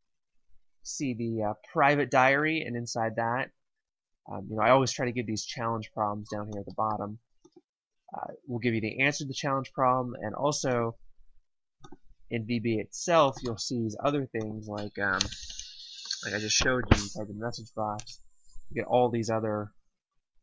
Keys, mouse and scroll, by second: 6.5 click, 10.6 click, 15.1 BackSpace, 17.5 x, 17.8 space.